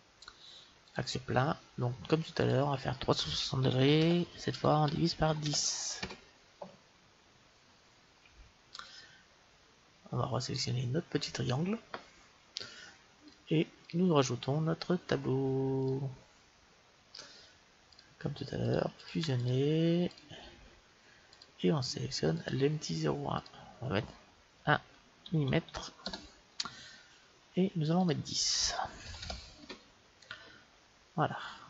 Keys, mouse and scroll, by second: 2.3-4.3 drag, 10.5-12.3 right drag, 13.2-15.6 drag, 17.8-23.0 drag, 24.9 click, 25.3 m, 27.9-29.7 drag.